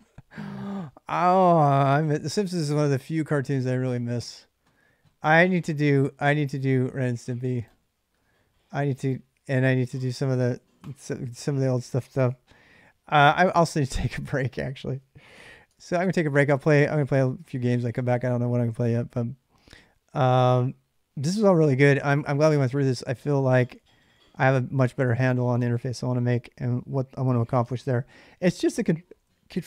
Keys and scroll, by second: 13.2-14.4 typing, 15.4 Return, 21.3-24.8 typing, 23.3 ctrl+[, 23.4 ctrl+j, 24.1 ctrl+[, 25.2 ctrl+[, 25.2 ctrl+j, 25.9-29.6 typing.